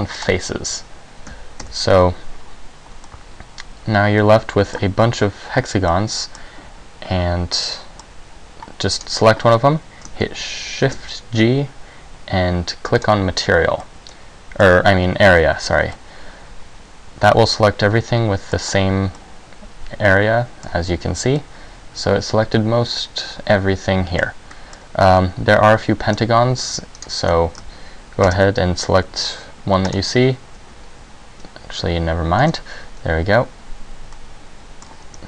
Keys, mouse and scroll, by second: 1.7 a, 3.2 middle click, 6.0 middle click, 7.7 middle click, 9.1 right click, 11.0 shift+g, 13.9 middle click, 16.1 middle click, 19.3 middle click, 21.5 middle click, 24.7 middle click, 27.1 shift+right click, 28.3 shift+g, 32.5 ctrl+z, 34.2 middle click.